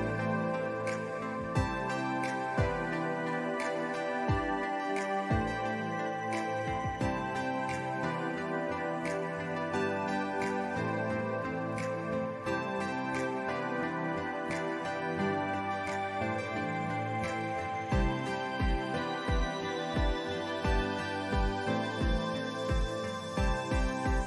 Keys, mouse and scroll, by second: 4.6 ctrl+z, 4.9 alt+scroll up 1, 5.5-6.8 drag, 7.4 space, 7.5-9.6 drag, 10.2 alt+scroll down 1, 12.2 scroll down 1, 12.5 alt+scroll up 1, 13.0 ctrl+s, 13.4-13.9 scroll up 1, 14.3 click, 19.0 ctrl+z, 20.0 ctrl+z, 20.8-24.2 drag.